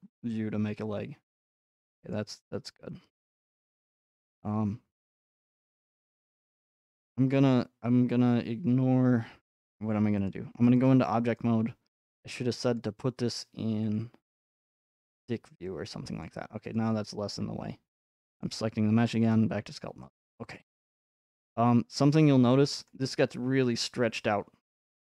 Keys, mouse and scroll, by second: 2.1 click, 4.1 click, 6.7-8.8 middle drag, 10.3-14.7 drag, 16.2 middle click, 18.4 click, 19.3 click, 21.5 middle click, 21.5-22.5 scroll up 4, 22.9-23.5 scroll up 1, 23.9-25.0 middle drag.